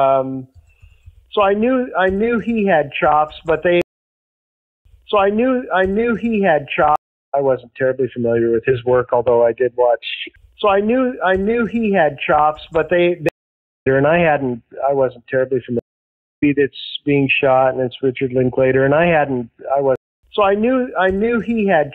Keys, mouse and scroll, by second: 3.7 space, 4.3 ctrl+shift+Delete, 4.8 space, 5.4-6.5 drag, 6.9 space, 7.1 click, 7.2 space, 11.6-13.0 drag, 12.8 space, 13.2 space, 13.7 click, 13.8 space, 15.7 space, 16.3 click, 16.3 space, 19.8 space, 20.0 click, 20.1 space, 21.6-21.9 drag.